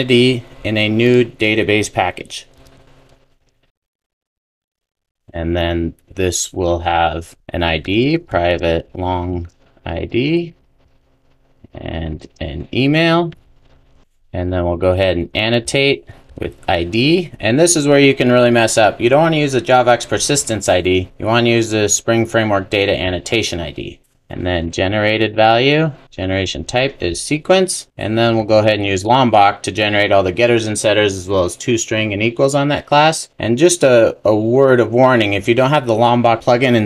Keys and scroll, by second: 2.8 super+n, 14.0 super+s, 24.3 Return, 27.9 super+s, 29.2 Return, 30.9 super+s.